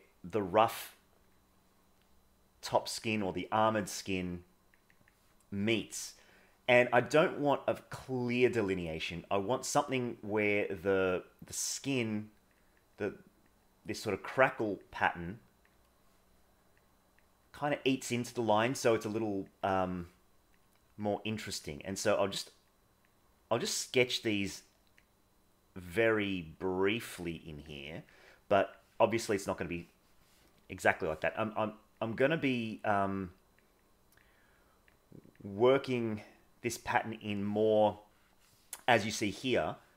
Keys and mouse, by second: 1.6 middle click, 2.7 click, 4.5 click, 6.1 middle click, 7.1-8.4 drag, 9.1 click, 11.8 click, 13.0 click, 13.6 click, 14.4 click, 15.3 click, 16.0 middle click, 16.8 click, 17.5 click, 18.3 click, 19.1 click, 19.7 click, 20.6 click, 21.2 click, 21.9 click, 22.7 click, 24.3 click, 25.0 click, 26.6 click, 27.4 click, 28.1 click, 28.6 click, 29.3 click, 30.9 click, 31.9 click, 32.9 click, 33.8 click, 34.6 click, 35.6 click, 36.3 click, 36.9 click, 38.3 middle click, 39.2 middle click.